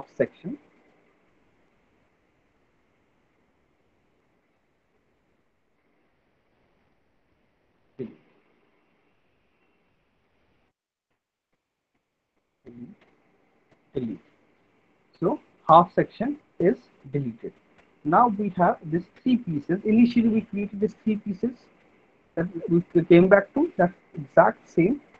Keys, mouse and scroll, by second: 0.5 Delete, 2.3 Delete, 2.9 click, 3.0 Delete, 4.3 click, 4.5 Delete, 4.9 click, 5.1 Delete, 6.2 click, 6.3 Delete, 9.0 middle click, 9.6 alt+middle click, 10.0 middle click, 10.7 alt+middle click, 11.7 click, 12.5 Delete, 13.5 click, 13.7 Delete, 14.8 middle click, 14.9 middle click, 18.8 alt+middle click, 18.9 alt+middle click, 20.0 middle click, 20.3 middle click, 21.6 alt+middle click, 22.0 middle click, 22.2 middle click, 22.4 alt+middle click, 22.8 alt+middle click, 23.7 click, 23.8 Delete, 24.9 click.